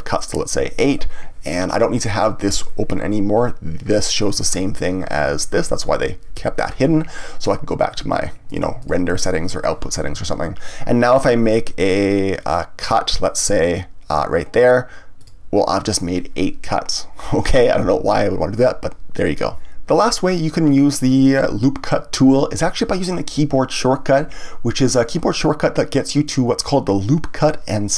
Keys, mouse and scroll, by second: 7.9 click, 8.4 click, 8.8 click, 15.2-18.2 drag.